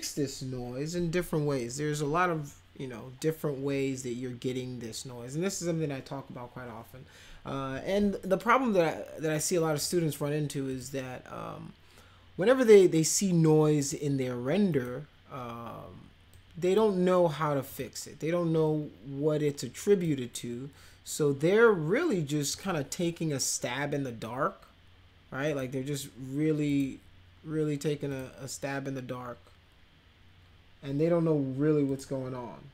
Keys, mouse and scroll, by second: 9.4-9.8 drag, 10.7 click, 13.8 click, 14.7 click, 16.3-16.8 drag, 17.7 click, 18.7-20.1 drag, 22.5 click, 25.5 click, 26.7 click, 28.1 click, 31.9 click.